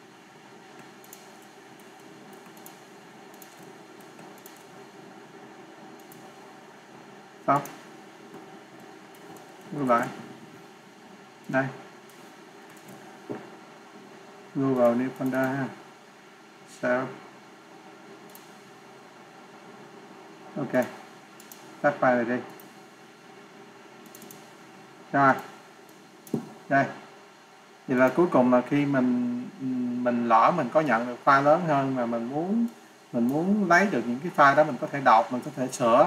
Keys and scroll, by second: 9.6 ctrl+s, 9.8 ctrl+w, 12.8 ctrl+s, 22.4 ctrl+s, 22.4 ctrl+w.